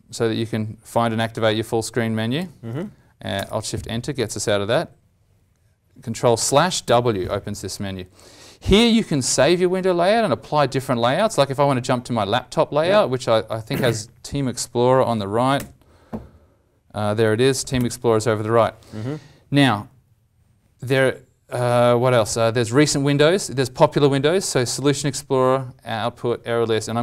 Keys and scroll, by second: 3.3 alt+shift+Return, 6.4 ctrl+\, 6.8 ctrl+w, 17.4 ctrl+\, 17.7 ctrl+m.